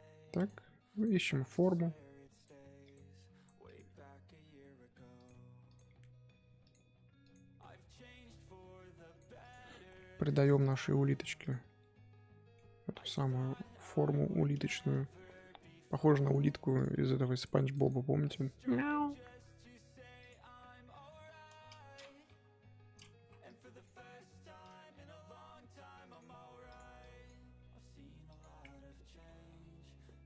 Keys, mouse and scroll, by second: 0.9 click, 2.8 click, 2.8 g, 3.6 click, 5.7 click, 7.2 click, 9.4 click, 10.6 click, 11.8-13.7 middle drag, 13.7 KP_1, 14.2-14.6 scroll up 1, 14.6 click, 16.7 click, 17.7 click, 17.8 click, 18.2 click, 20.5-20.8 scroll down 2, 20.8 middle click, 21.4-21.9 scroll up 1, 21.9-22.3 scroll up 1, 22.3 KP_3, 23.1 z, 23.4-26.7 drag, 27.0-28.9 drag, 28.9-29.3 middle drag, 29.3 z, 29.5-30.2 middle drag.